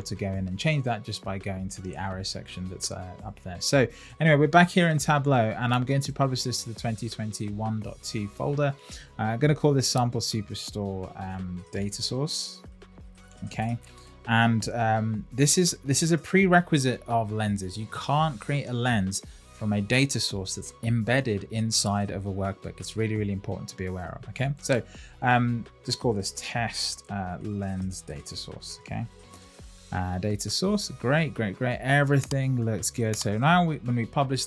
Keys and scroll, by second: 14.8 Left.